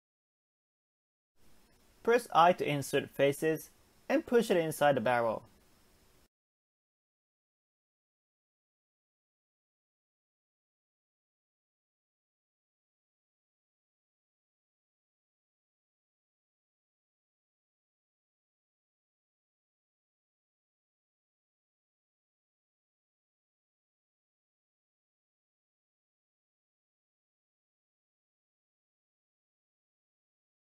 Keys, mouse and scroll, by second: 0.6 click, 1.5 i, 6.6 scroll down 1, 6.8 middle click, 7.2 Tab, 7.5 scroll down 1, 7.7-8.7 middle drag, 8.7-9.0 scroll up 1, 9.0 shift+middle click, 9.4 Tab, 10.4-12.5 shift+middle drag, 12.5 ctrl+r, 17.4 middle click, 17.8 Tab, 18.3 middle click, 18.9 KP_7, 19.6 shift+middle click, 19.9-20.9 scroll up 1, 20.9 click, 22.7 shift+click, 23.9 scroll down 2, 24.1-26.1 middle drag, 26.1 KP_1, 26.9-27.9 shift+middle drag, 27.9 e.